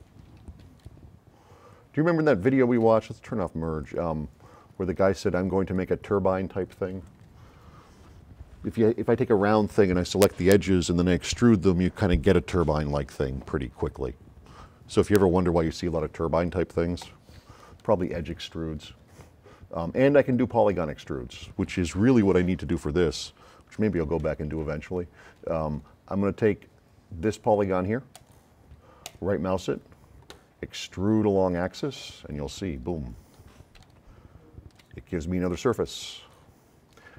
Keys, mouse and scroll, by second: 0.1 s, 0.8-2.3 right drag, 2.7 right click, 3.8 click, 4.8 s, 5.1-7.3 right drag, 8.2 click, 17.4 s, 17.8-19.3 right drag, 27.5 click, 28.1 click, 29.1 right click, 31.6 click, 32.4 scroll down 1, 32.6 scroll up 4, 33.8 right click, 33.8 s, 35.6-36.3 drag, 36.7 middle click, 36.9 middle click.